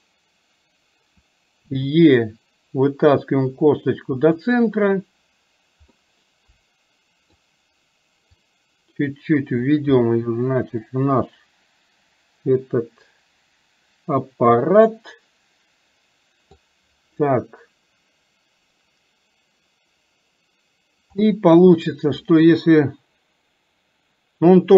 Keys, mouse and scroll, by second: 6.0-7.4 middle drag, 8.5-9.7 drag, 10.2-16.5 middle drag, 16.5-21.4 scroll down 1, 21.4 middle click, 22.2-24.7 scroll down 1.